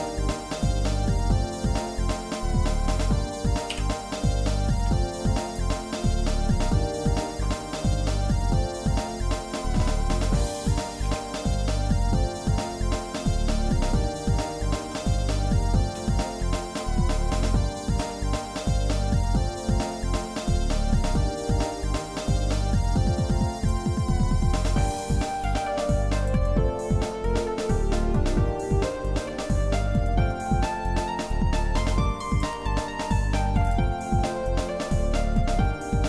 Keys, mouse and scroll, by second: 0.1 shift+middle click, 4.0 KP_7, 4.7 z, 6.5 middle click, 7.6 middle click, 8.1 scroll up 1, 11.0 a, 11.8 scroll up 1, 13.0 middle click, 14.6 shift+z, 16.4 shift+z, 18.0 g, 24.3 shift+middle click, 25.0 shift+middle click, 25.5 z, 26.8-27.3 scroll down 2, 27.3-30.3 shift+middle drag, 30.4 middle click, 32.3 click, 33.8 click, 34.2 shift+middle click, 35.1 middle click, 35.6 shift+middle click.